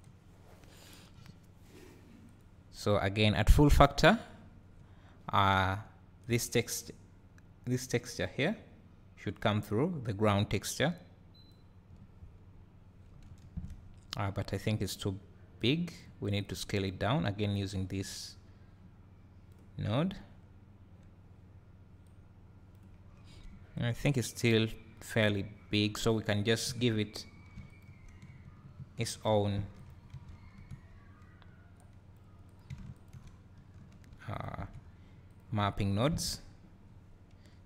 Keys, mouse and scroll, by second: 2.3 click, 3.6-6.3 drag, 8.4-15.7 drag, 13.2 `, 13.8-15.6 scroll up 2, 16.4 click, 17.7-22.1 drag, 23.1-23.5 scroll down 2, 23.5 `, 26.2 click, 27.8 ctrl+shift+click, 29.8 ctrl+click, 31.8-32.6 drag, 33.0 ctrl+shift+click, 34.2 ctrl+t, 35.0 click.